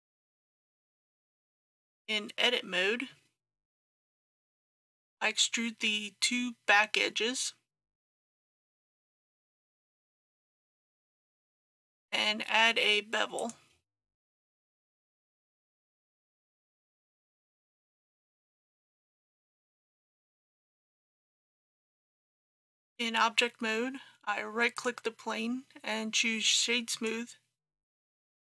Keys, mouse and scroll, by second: 1.3 Tab, 2.0-3.9 middle drag, 3.9 2, 6.4 scroll down 1, 8.5 e, 9.0 z, 9.4 KP_1, 9.6 KP_0, 13.4 click, 14.4 shift+click, 15.1 shift+click, 16.6 ctrl+b, 18.2-20.8 scroll up 1, 20.8 click, 22.5 Tab, 24.8 right click, 27.0-28.4 drag.